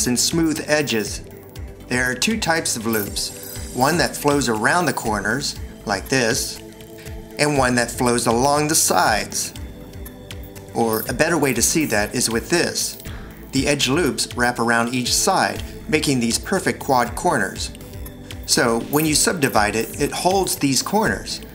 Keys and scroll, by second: 1.7 Escape, 2.8 f, 6.8 v, 12.3 shift+1, 19.9 c, 21.4 Escape.